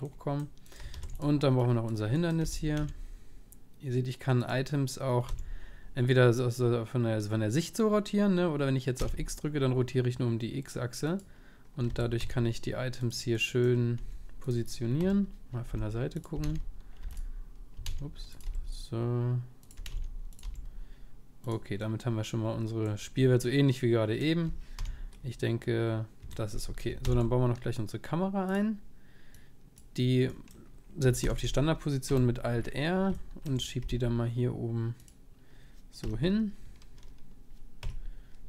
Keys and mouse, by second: 0.8-2.4 right drag, 0.9 shift+d, 1.6-4.3 drag, 2.4 r, 5.3 r, 11.9 r, 13.4-15.0 middle drag, 14.1 g, 15.0 KP_1, 15.7 g, 16.3 s, 17.8 s, 18.5 g, 19.8 s, 20.4 g, 21.9-24.8 middle drag, 24.7 p, 26.2 p, 26.6-29.4 middle drag, 27.0 shift+a, 29.4-31.2 drag, 30.6-34.8 middle drag, 31.2 alt+r, 32.1 KP_7, 33.9 g, 36.0 KP_1, 37.8 KP_0.